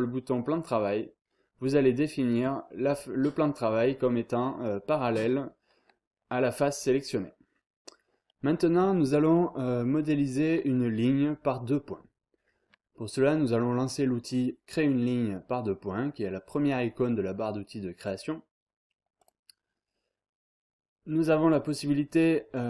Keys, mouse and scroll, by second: 19.2 click.